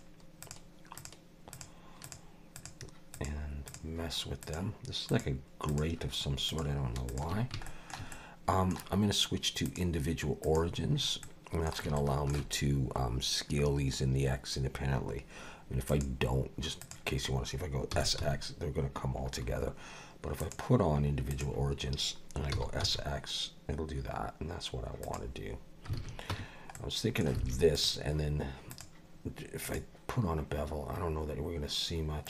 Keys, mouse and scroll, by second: 0.4 shift+click, 1.0 click, 1.5 shift+click, 2.0 shift+click, 3.1 shift+click, 3.7 shift+click, 4.4 shift+click, 5.1 shift+click, 5.7 shift+click, 6.5 shift+click, 7.1 shift+click, 7.7 shift+middle click, 8.1 middle click, 9.7 click, 11.0 scroll up 2, 11.2 middle click, 12.0 shift+middle click, 15.9 click, 17.9 s, 20.4 click, 22.5 s, 26.0 alt+a, 26.3 Tab, 26.7 middle click, 27.4 alt+a, 27.7 click, 28.7 click.